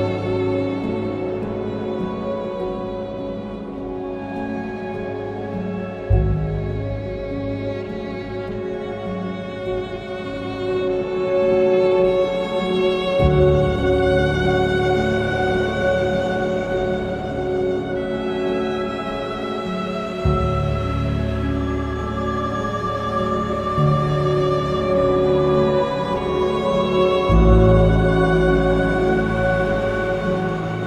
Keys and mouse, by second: 1.2 r, 1.6 z, 3.1 KP_Subtract, 3.3 KP_9, 3.5 KP_2, 3.5 KP_0, 3.7 KP_Enter, 4.3 Escape, 4.9 r, 5.3 z, 5.6 KP_9, 5.9 KP_0, 6.1 KP_Enter, 6.9 ctrl+z, 7.3 ctrl+z, 8.1 r, 8.4 z, 8.8 KP_9, 9.0 KP_0, 9.3 KP_Enter, 10.3 ctrl+KP_1, 13.1 3, 14.0 alt+click, 18.2 shift+click, 19.2 x, 23.2 alt+z, 23.4 middle click, 24.1 KP_7, 26.0 click, 26.9 ctrl+KP_Add, 27.1 ctrl+KP_Add, 27.2 ctrl+KP_Add, 27.5 x, 28.5 click, 29.3 ctrl+KP_Add, 29.5 ctrl+KP_Add, 30.0 ctrl+KP_1.